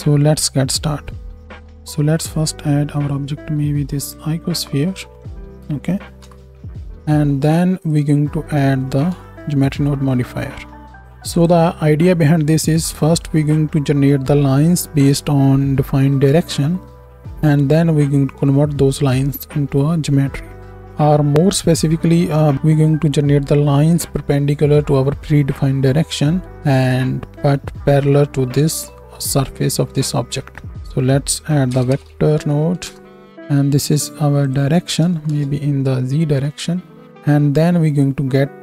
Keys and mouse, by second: 1.4 x, 2.2 shift+a, 6.1 KP_1, 9.1 Home, 10.8-12.1 middle drag, 12.1 ctrl+shift+click, 12.2 ctrl+shift+d, 12.6 middle click, 13.0 Tab, 13.6 shift+Up, 13.6 shift+click, 13.7 shift+Down, 13.8 shift+Right, 13.8 shift+Left, 14.1 space, 14.6-17.3 right drag, 15.2 space, 16.2-17.3 shift+drag, 16.2-17.3 shift+middle drag, 16.6 shift+Right, 16.7 shift+Left, 16.8 space, 17.9-20.3 right drag, 20.6 click, 24.8 middle click, 30.6 shift+a, 31.0 middle click, 34.4-38.6 drag.